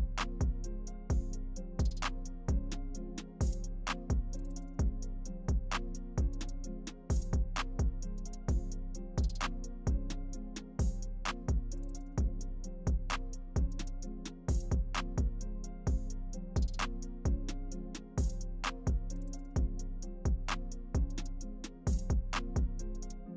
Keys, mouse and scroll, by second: 1.5 click, 2.0 scroll down 1, 2.1 alt+click, 2.6 scroll up 1, 2.8-4.0 alt+drag, 4.0 scroll up 1, 4.2 alt+click, 6.2 click, 6.3 scroll down 1, 6.4 alt+click, 7.9-8.6 typing, 8.1 scroll up 1, 8.3 alt+middle click, 8.5 alt+click, 8.8 alt+middle click, 9.4 click, 10.0 q, 10.4 click, 11.6 click, 11.7-13.6 alt+drag, 12.5-15.3 typing, 13.6 alt+scroll down 1, 13.7-15.5 alt+drag, 15.5 alt+scroll up 1.